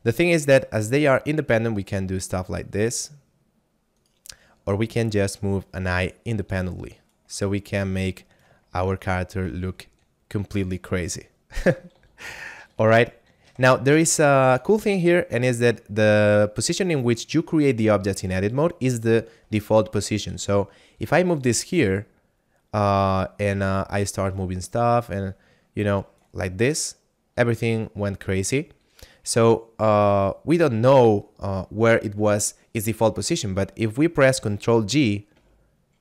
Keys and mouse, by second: 0.4 r, 4.0 right click, 7.9 right click, 8.8 shift+middle click, 9.7 g, 10.7 click, 11.3 shift+middle click, 11.9 ctrl+z, 12.2 ctrl+z, 12.7 ctrl+z, 12.9 ctrl+z, 14.0 shift+middle click, 14.6 right click, 20.3 g, 21.3 click, 23.8 right click, 26.8 middle click, 27.7 right click, 30.0 middle click, 35.2 alt+g.